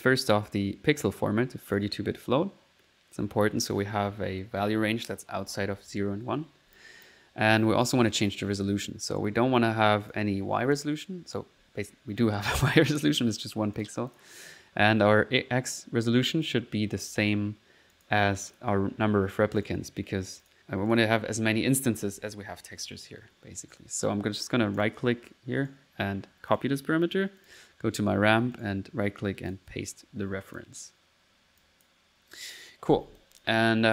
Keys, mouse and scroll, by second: 1.7 click, 3.3 middle click, 6.8 click, 9.6 click, 10.6 click, 11.2 middle click, 12.5 middle click, 13.8 click, 16.9 middle click, 17.2 click, 18.0 click, 18.5 click, 19.6 right click, 20.4 click, 20.9 click, 24.8 click, 25.6 right click, 26.0 right click, 26.5 click, 27.4 click, 27.7 middle click, 28.6 right click, 29.5 click, 30.0 middle click, 30.5 click, 33.2 click.